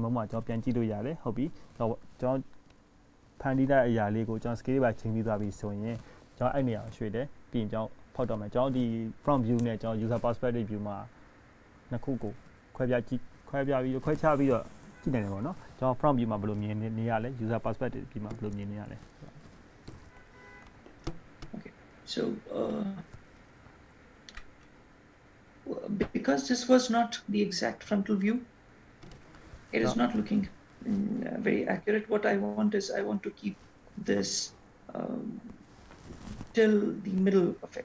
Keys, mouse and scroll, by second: 0.1 middle click, 3.7-4.4 scroll down 1, 4.4-4.7 scroll down 1, 4.7-6.2 scroll up 1, 6.2-6.8 scroll down 1, 7.0 shift+middle click, 8.0-8.6 scroll up 2, 8.6 scroll down 1, 9.1 shift+middle click, 10.7 click, 11.6 click, 15.8 g.